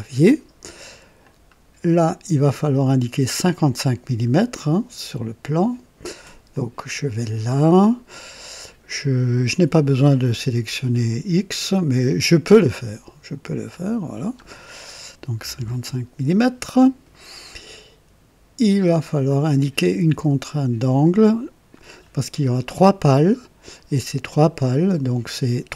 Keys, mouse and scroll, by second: 1.2-2.3 drag, 6.5 click, 12.6 click, 13.7 click, 15.4 KP_5, 15.5 KP_5, 15.9 KP_Enter, 20.0-21.2 drag.